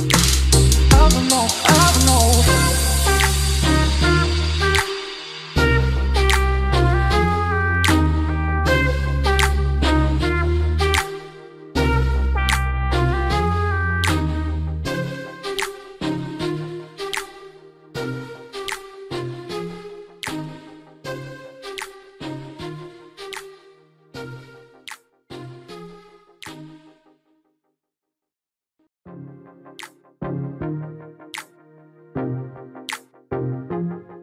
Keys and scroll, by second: 6.6 ctrl+z, 9.0 ctrl+z.